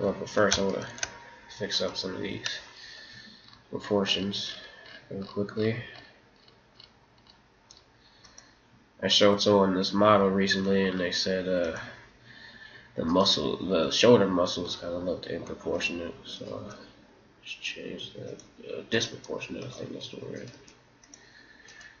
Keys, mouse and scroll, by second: 0.9-2.3 middle drag, 1.8 right click, 3.0 g, 9.1 right click, 9.3 g, 13.1 right click, 13.7 g, 16.3 right click, 16.6 g, 18.0 right click, 18.9-22.0 right drag, 19.1 g, 20.5 g.